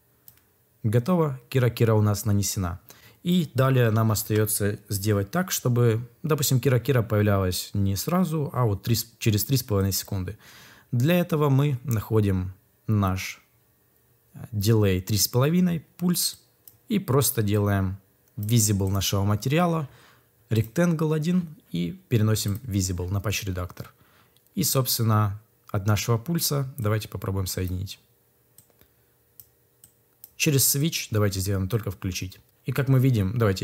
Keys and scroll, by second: 4.0 ctrl+s.